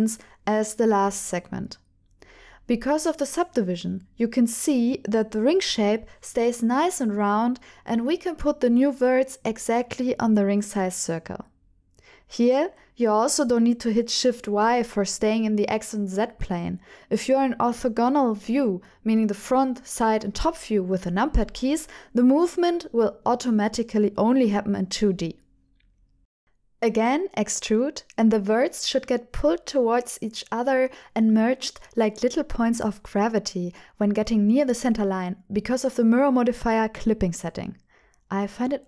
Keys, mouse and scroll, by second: 2.7 click, 5.0 shift+click, 5.2 shift+middle click, 7.7 click, 8.3 g, 10.4 click, 11.2 g, 11.3 o, 11.4 g, 13.0 right click, 13.9 KP_3, 15.1 g, 17.2 click, 18.2 KP_7, 19.3 g, 23.0 click, 23.3 middle click, 24.1 g, 26.0 right click, 26.7 click, 27.4 alt+click, 28.5 e, 32.1 click, 32.8 shift+click, 33.5 click, 33.7-36.6 middle drag, 36.9 shift+middle click, 37.8 shift+click.